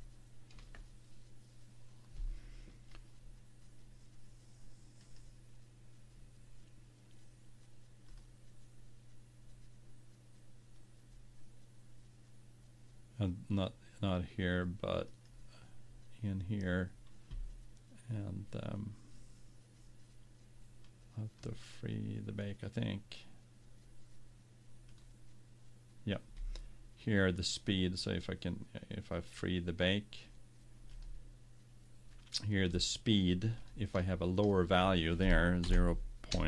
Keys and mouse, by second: 5.6-6.9 right drag, 8.2-10.1 right drag, 15.3-17.0 right drag, 21.0-22.9 right drag, 25.0-26.9 drag, 29.4-33.4 drag, 34.0-35.9 drag.